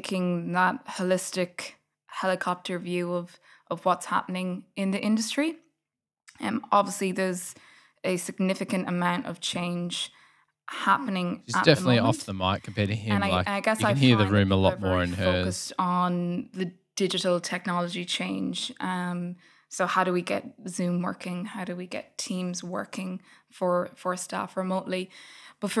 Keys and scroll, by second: 2.2 super+], 2.5 Delete, 4.0 super+[, 4.2 super+[, 5.2 F8.